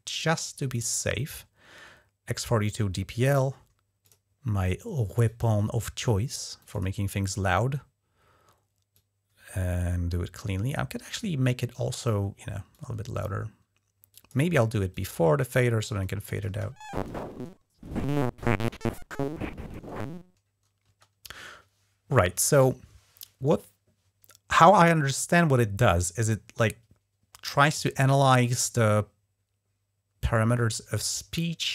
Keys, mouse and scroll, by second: 3.8 click, 5.0 click, 6.4 click, 6.5 click, 8.7-11.8 drag, 12.5 click, 13.9 click, 14.7 click, 16.2 space, 20.6 space.